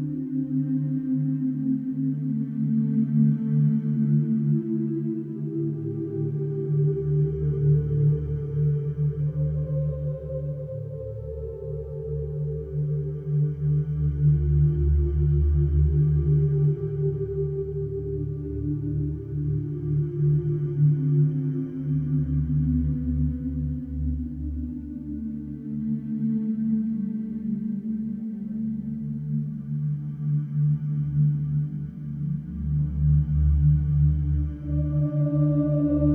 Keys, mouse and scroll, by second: 0.6-1.2 middle drag, 1.2 scroll up 1, 1.4-1.8 shift+middle drag, 1.8 scroll up 2, 2.3-3.6 right drag, 3.6 click, 4.5 Tab, 4.8 click, 5.5 click, 5.9 click, 6.5 e, 7.9-9.4 middle drag, 9.4 e, 15.0-16.5 middle drag, 16.5 e, 20.0 e, 21.3-22.2 scroll down 9, 22.2 e, 23.7 alt+middle click, 24.4 middle click, 25.1 scroll up 1, 25.4 shift+middle click, 26.3 scroll up 2, 26.6 shift+middle click, 27.2 s, 29.3 e, 30.4 Tab, 30.8 scroll down 2, 31.3-31.6 middle drag, 31.6 click, 32.1 scroll down 2, 32.9 click, 33.6 click, 34.4 shift+d, 35.5 ctrl+z.